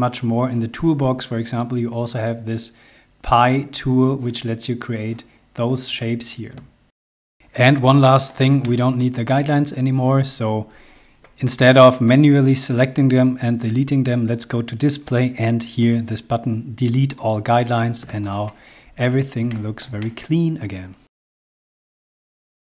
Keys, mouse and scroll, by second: 1.1 click, 6.2 space, 6.9 scroll down 1, 7.6 middle click, 8.6 middle click, 9.6 scroll down 1, 14.1 click, 16.7 click, 17.6 space, 17.8 click, 18.3 scroll up 1, 19.1 shift+middle click.